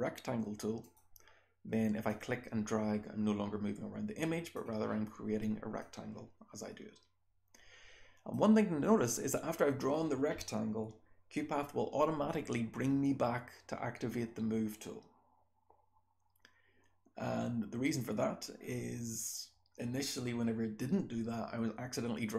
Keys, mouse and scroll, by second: 0.8 click, 0.8-2.1 scroll down 1, 2.1-4.5 drag, 2.1-4.5 scroll down 1, 4.5-5.8 scroll down 1, 5.8-8.3 drag, 5.8-8.3 scroll down 1, 8.3-22.3 scroll down 1.